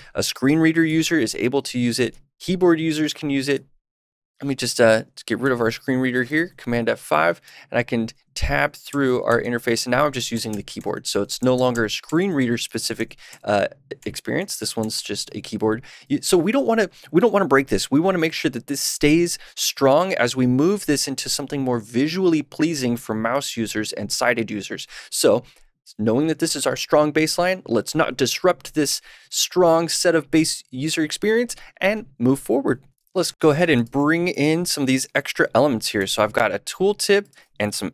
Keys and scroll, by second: 4.0 Tab, 7.5 Tab, 8.3 shift+Tab, 8.8 Right, 10.1 Left, 10.7 Right, 12.1 Right, 12.7 Left, 13.2 Right, 14.6 Left.